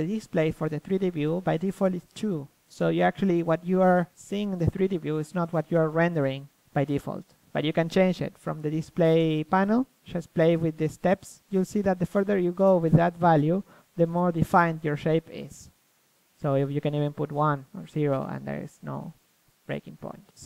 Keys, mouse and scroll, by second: 0.4-1.5 middle drag, 1.5-3.2 drag, 4.8-6.6 middle drag, 6.6-7.8 drag, 7.8 middle click, 8.2 click, 8.8 click, 9.3-10.7 middle drag, 10.7-14.0 drag, 14.3-19.5 drag, 19.5-20.4 middle drag.